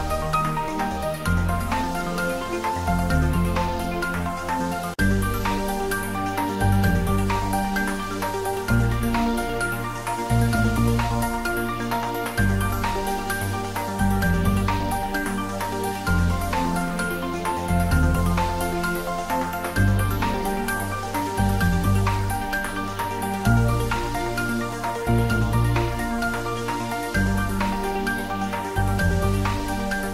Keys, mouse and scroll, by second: 1.0 Up, 1.6 Right, 2.1 Return, 2.7 g, 3.4 click, 3.9-5.0 typing, 7.3 click, 7.5-8.4 typing, 9.8 Return, 10.0 ctrl+s, 10.6 ctrl+middle click, 11.2 shift+middle click, 11.4 ctrl+shift+middle click, 11.7-13.2 shift+middle drag, 13.2 ctrl+middle click, 13.5 middle click, 14.7 ctrl+middle click, 14.9 shift+middle click, 15.5 Tab, 16.9 shift+click, 17.9 ctrl+b, 18.7 click, 18.8 Tab, 19.0 middle click, 20.1 Tab, 20.7 click, 22.0 Tab, 22.8 ctrl+3, 23.4 Tab, 24.1 ctrl+r, 24.8 click, 25.8 Tab, 26.4-29.0 middle drag, 29.0 Tab, 29.8 ctrl+r.